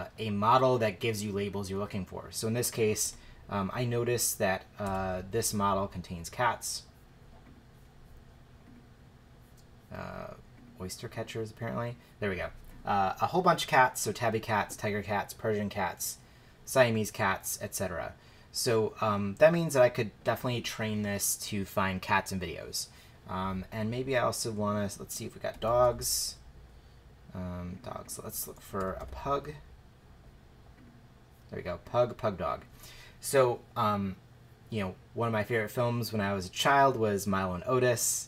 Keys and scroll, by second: 3.0 super+f, 4.9 Return, 25.3-26.3 typing, 28.3-29.5 typing.